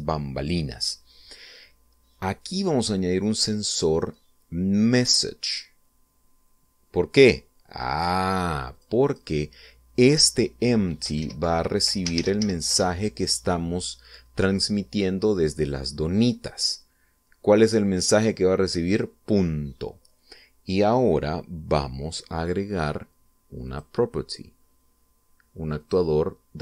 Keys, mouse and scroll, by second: 3.3 click, 6.0 click, 9.7 click, 10.0 click, 12.1-13.3 typing, 13.6 Return, 24.7 click.